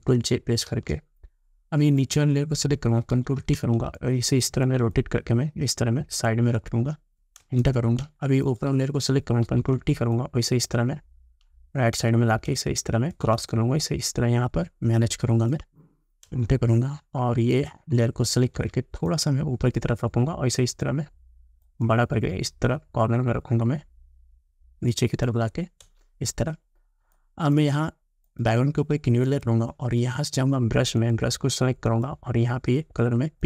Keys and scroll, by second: 0.7 ctrl+j, 3.2 ctrl+t, 7.5 Return, 9.5 ctrl+t, 16.3 Return, 18.5 ctrl+t, 25.9 Return.